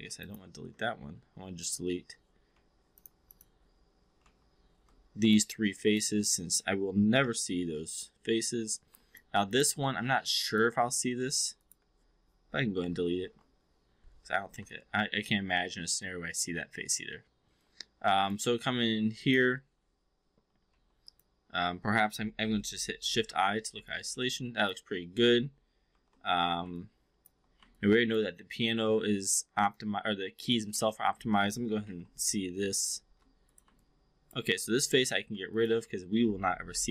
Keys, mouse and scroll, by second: 0.2 ctrl+click, 1.5 click, 2.5 4, 2.9 click, 4.1 3, 5.3 shift+click, 5.9 shift+click, 7.0 Delete, 9.1-9.6 alt+drag, 9.9 alt+middle drag, 10.3-10.6 alt+drag, 11.5 click, 12.7 Delete, 14.7-18.3 alt+drag, 18.5 4, 19.5 5, 20.7 4, 22.9 shift+i, 23.8-24.7 alt+drag, 25.9 shift+i, 26.6-27.3 alt+drag, 27.7 alt+click, 28.4 alt+middle click, 28.7-29.7 alt+drag, 28.9 alt+s, 30.3 click, 30.9 alt+middle click, 31.8 shift+i, 32.8 space, 33.7-34.3 alt+drag, 34.5 3, 34.7 4, 34.9 click, 35.3 3, 35.5 click, 36.6 Delete.